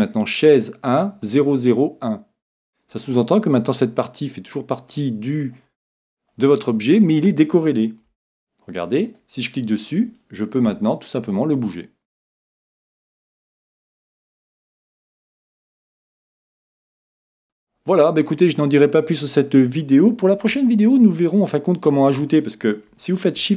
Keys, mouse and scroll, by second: 3.0-4.9 middle drag, 5.0-8.0 middle drag, 8.1 Tab, 9.0 right click, 11.4-13.1 drag, 16.5 ctrl+z, 17.3-23.2 middle drag, 23.4 shift+a.